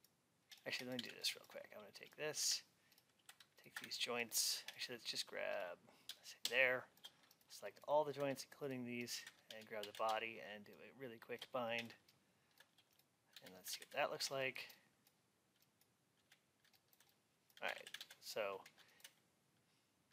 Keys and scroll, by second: 9.4 alt+x.